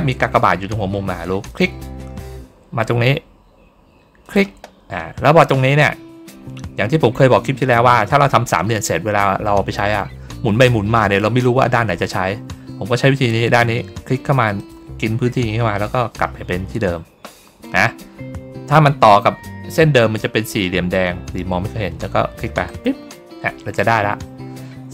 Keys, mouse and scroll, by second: 1.4 click, 4.1 click, 14.5 click, 22.6 click.